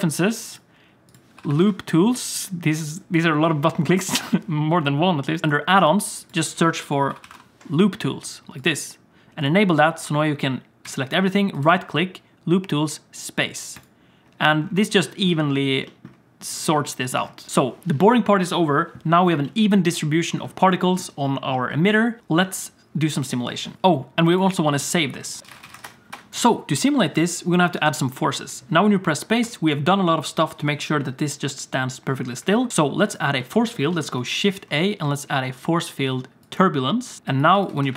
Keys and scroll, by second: 5.4 F4, 10.8 a, 13.9 typing, 23.7 ctrl+s, 28.3 space, 29.4 space, 34.3 shift+a, 37.7 Tab, 37.8 Tab.